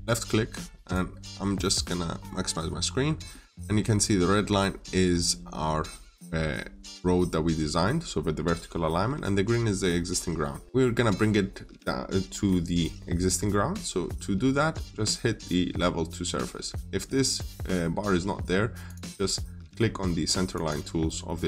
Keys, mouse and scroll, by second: 2.3-2.7 scroll up 1, 3.1 middle click, 10.0 scroll down 1, 10.3 middle click, 18.7 click.